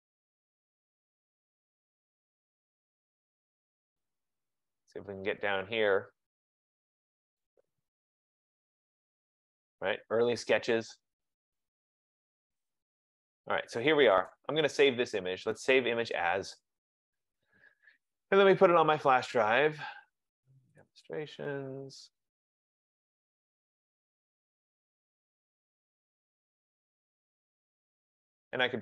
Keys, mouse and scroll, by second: 3.0 click, 3.9 scroll, 4.5-6.8 scroll, 6.8-8.8 scroll, 8.8 scroll, 11.1-13.8 scroll, 14.4 right click, 15.8 click, 18.0 scroll, 18.8 click, 20.9 click, 21.1 click, 22.4 click, 22.7 click, 24.0 click, 24.2 click, 24.5 F15, 25.6 click, 26.2-27.6 typing, 28.7 click.